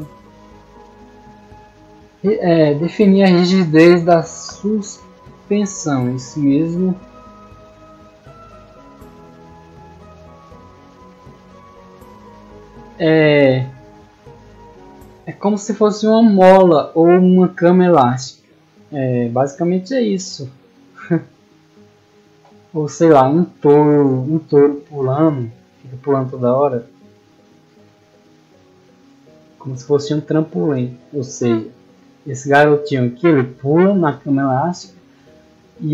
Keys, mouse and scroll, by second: 0.8-1.6 scroll down 1, 27.6 click, 29.0 click, 29.6 scroll down 1, 29.8-30.3 scroll up 1, 30.5 middle click, 35.2-35.9 middle drag.